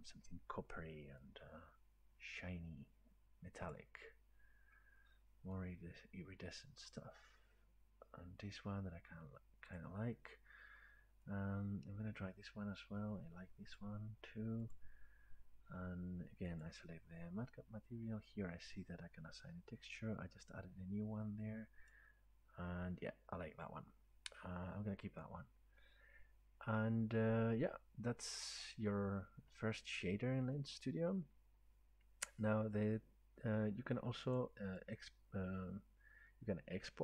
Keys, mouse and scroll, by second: 3.7-6.5 drag, 9.8 click, 13.8 click, 14.8 click, 16.6 click, 20.2-21.7 drag, 21.9-27.0 drag, 34.4 click, 35.0-37.0 right drag.